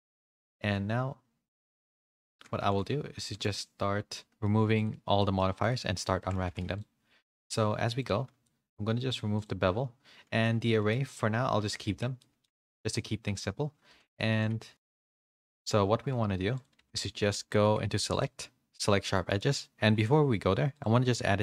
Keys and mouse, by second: 2.6 a, 2.7 a, 3.2 middle click, 3.5-4.4 middle drag, 5.1 middle click, 5.6 click, 6.1 shift+middle click, 6.4 a, 6.6 a, 8.1 click, 9.3 click, 10.4-10.8 middle drag, 11.8 Tab, 12.1 middle click, 12.6 shift+middle click, 12.9 middle click, 13.8 2, 14.3 a, 14.4 a, 14.7 ctrl+e, 14.7 a, 15.0 ctrl+e, 16.7 a, 16.9 a, 17.6 2, 18.2-20.9 drag, 21.2 q.